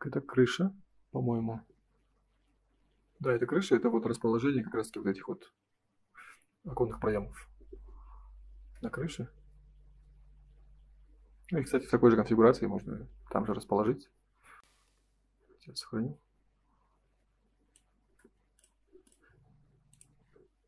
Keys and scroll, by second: 14.9 Print.